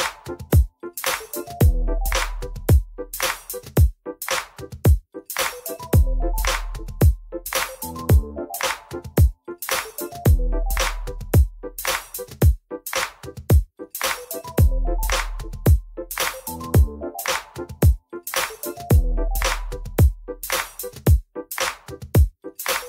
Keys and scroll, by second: 3.8 F4, 6.1 alt+x, 10.0 F4, 11.4 F4, 13.3 F4, 19.7 F3.